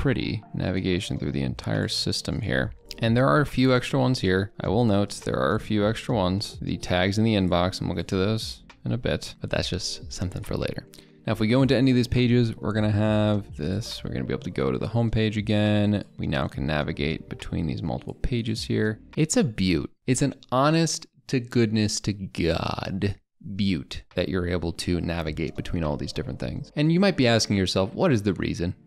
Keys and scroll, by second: 8.2 ctrl+a, 8.6 ctrl+k, 9.0 ctrl+v.